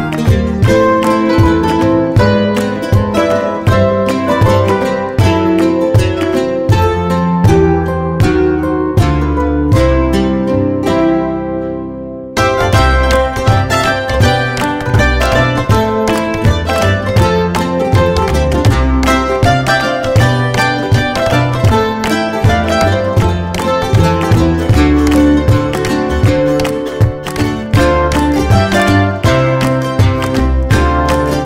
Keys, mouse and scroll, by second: 0.9 click, 1.2 middle click, 2.0 middle click, 2.2 middle click, 3.1 middle click, 3.1 ctrl+click, 4.2 middle click, 5.8 middle click, 7.1 ctrl+click, 10.4 middle click, 11.0 middle click, 12.1 click, 12.9 click, 13.2 ctrl+z, 14.2 scroll down 1, 15.9 scroll up 1, 17.6 alt+click, 19.5 middle click, 20.2 middle click, 21.1 click, 22.5 click, 22.8 middle click, 24.4 middle click, 24.4 scroll down 1, 24.9-25.4 scroll down 1, 26.3 alt+middle click.